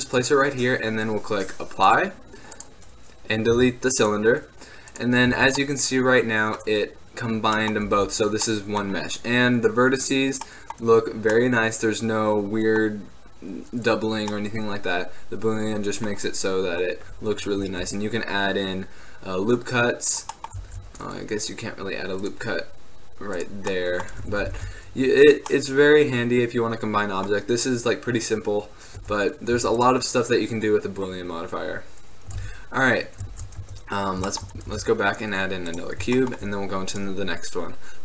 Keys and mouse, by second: 0.3 right click, 2.7 ctrl+z, 3.6 x, 5.1-6.6 drag, 5.5 z, 8.1 Tab, 15.2 middle click, 17.7 ctrl+r, 20.3 right click, 20.8 ctrl+r, 23.9 click, 24.7 ctrl+z, 29.1 Tab, 29.7 x, 32.5 shift+a, 33.5 shift+c, 34.8 shift+a.